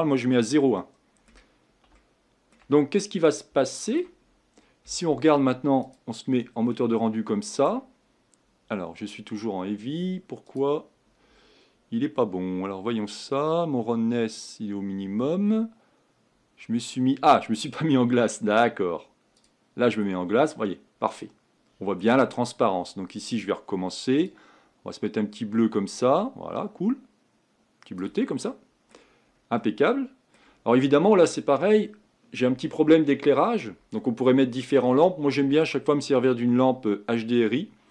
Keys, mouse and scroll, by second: 0.8-3.0 middle drag, 3.0-3.6 scroll up 4, 3.6-5.8 shift+middle drag, 5.8 click, 6.7-10.6 middle drag, 10.6 click, 19.5 click, 20.5-24.2 middle drag, 24.2 click, 28.5 middle click, 29.2-29.6 scroll down 3, 29.6-37.9 middle drag.